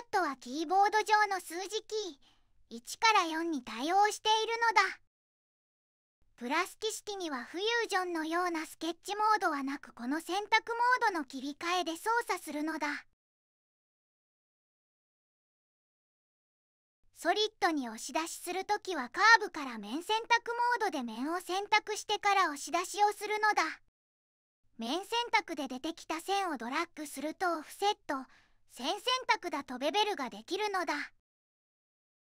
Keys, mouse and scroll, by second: 9.4 2, 17.2 right click, 18.4 click, 19.5 3.